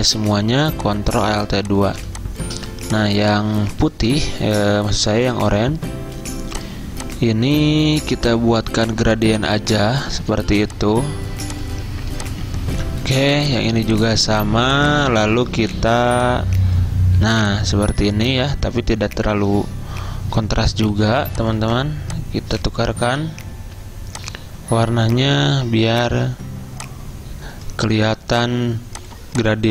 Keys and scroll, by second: 1.5 v, 21.0-21.7 typing.